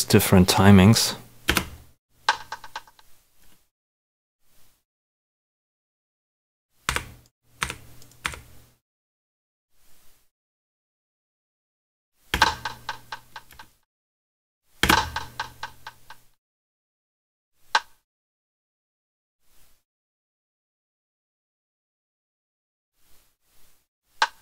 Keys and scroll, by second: 1.4 space, 6.8 Delete, 12.3 space, 14.8 space, 17.9 space, 24.1 space.